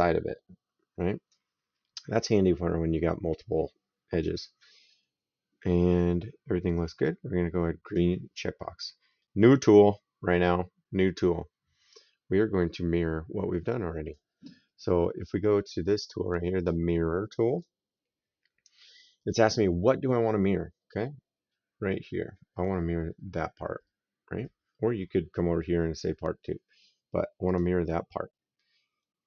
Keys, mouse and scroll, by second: 7.7 click, 9.0 middle click, 9.5 right click, 17.4 click, 27.3 click.